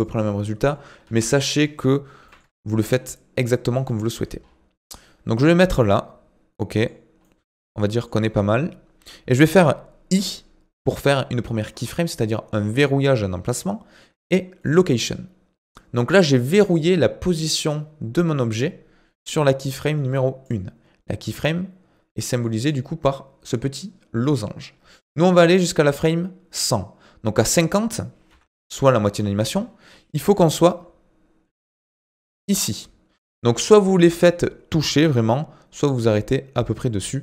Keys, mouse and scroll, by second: 0.2 middle click, 1.0 KP_1, 2.2 g, 4.3-4.8 scroll up 2, 4.8-10.1 middle drag, 19.9-25.6 drag, 25.8-28.3 drag, 28.3 KP_3, 29.6-30.1 scroll up 2, 30.1 g, 33.4-33.7 scroll up 4, 33.7 shift+middle click, 34.0-34.9 scroll up 2, 34.9 g.